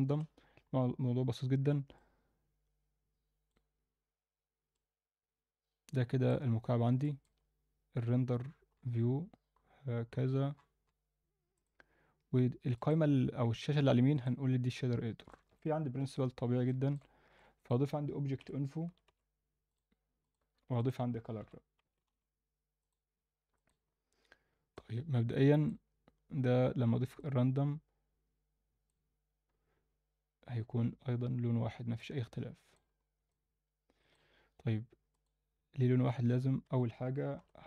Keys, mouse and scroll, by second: 2.0-3.5 drag, 4.7-6.3 drag, 6.6 scroll up 1, 7.0 alt+shift+middle click, 7.9-9.4 scroll down 8, 9.7-10.3 scroll down 2, 12.2 click, 12.2 scroll down 4, 12.7-14.2 drag, 15.3 alt+shift+middle click, 16.0 n, 16.7 alt+shift+middle click, 17.3 shift+a, 20.5 shift+a, 23.8-24.7 scroll up 2, 24.7-25.8 drag, 27.2-29.0 drag, 31.4 scroll down 1, 32.0-32.7 middle drag, 32.9-33.3 scroll up 2, 33.3 alt+middle click, 35.1 click, 35.5-36.2 scroll down 2, 36.2 Tab, 36.6 a, 37.3 p.